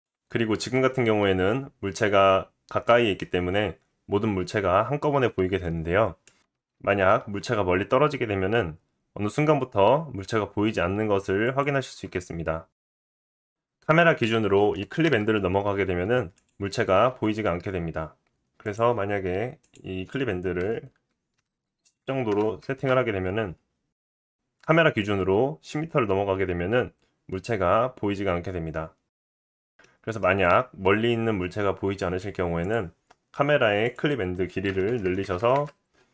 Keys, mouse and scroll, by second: 0.0-1.1 drag, 4.9 click, 5.5 click, 6.9 g, 13.2-14.8 shift+middle drag, 14.8-16.5 drag, 14.8 KP_0, 16.5-18.6 middle drag, 16.8 g, 18.6 click, 18.7 middle click, 19.6-24.1 drag, 24.1-32.6 middle drag, 24.8 g, 30.3-30.7 scroll down 2, 32.6 click, 32.7-33.8 middle drag, 33.8-36.1 drag, 35.0 KP_0, 35.2 KP_0.